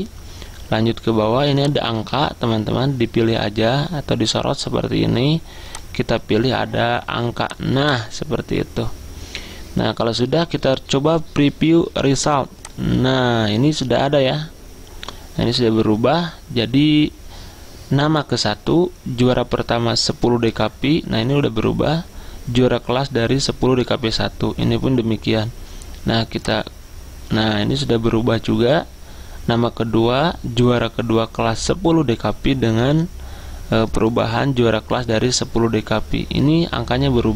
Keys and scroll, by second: 2.2 ctrl+a.